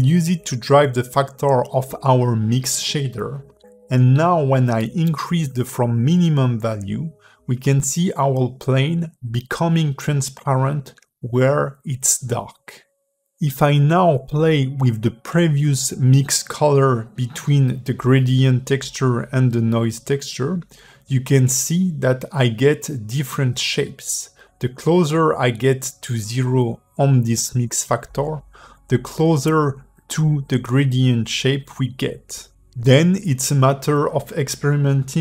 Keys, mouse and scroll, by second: 0.2 click, 0.8 shift+click, 3.6 g, 6.4 click, 12.0 click, 28.8 click, 31.8-32.7 scroll up 3, 32.7 click.